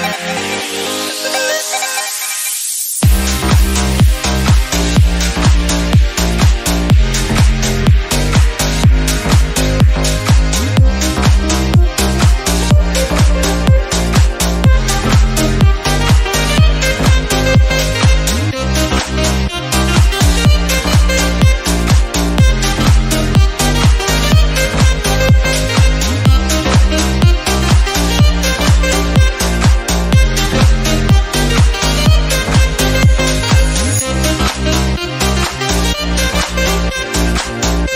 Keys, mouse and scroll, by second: 0.9 click, 2.0 BackSpace, 2.6 click, 4.7 click, 5.1 middle click, 5.1-5.7 scroll up 2, 5.9 click, 6.5-7.0 scroll down 2, 7.2 click, 8.1-9.0 middle drag, 9.0 click, 9.5-11.0 drag, 12.6 middle click, 12.7 scroll up 3, 12.9 click, 14.6 click, 15.3 click, 15.9-17.1 drag, 17.1 e, 18.0 click, 19.8 click, 20.2 scroll down 1, 20.4 click, 20.7-21.6 scroll down 1, 21.6 click, 22.5 middle drag, 22.7 scroll down 1, 23.0 click, 23.5-24.3 middle drag, 24.3 scroll up 3, 24.4-24.9 drag, 25.4 click, 25.8 shift+click, 25.9 scroll down 2, 26.0 shift+middle click, 26.4 shift+click, 26.8 shift+click, 27.1 shift+click, 28.2 ctrl+l, 28.3 drag, 28.4 scroll down 2, 28.6 middle drag, 28.8-29.6 scroll up 3, 29.6 click, 30.2 click, 32.9 click, 33.0-33.4 scroll down 4, 33.4-33.8 scroll up 3, 33.8 click, 34.0-34.4 scroll down 6, 34.4-34.9 scroll up 1, 35.1 scroll up 2, 35.3 click, 35.5-36.0 middle drag, 36.0-37.0 scroll up 1, 37.0 click, 37.5 click.